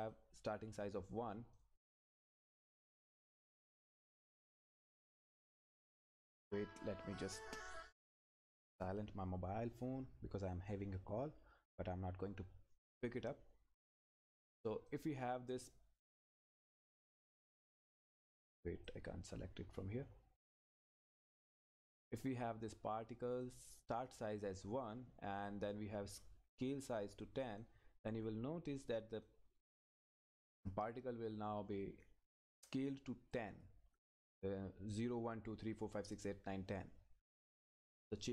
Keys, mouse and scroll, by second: 0.0 click, 14.9 click, 19.6-20.6 scroll up 1, 20.6 click, 21.3-23.1 scroll up 1, 23.4-27.6 drag, 27.8 click, 28.8-29.2 scroll up 1, 29.2 click, 29.8 scroll up 1, 30.2-32.9 drag, 32.9 scroll down 1, 33.3 click, 38.2 click.